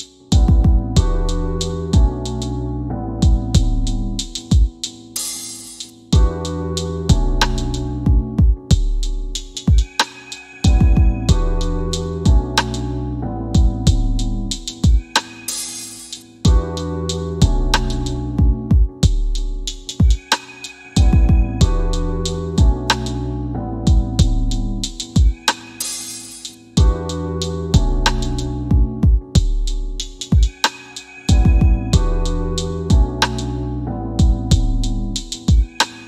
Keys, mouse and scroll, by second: 0.6 scroll down 1, 2.0 scroll up 1, 2.6 middle click.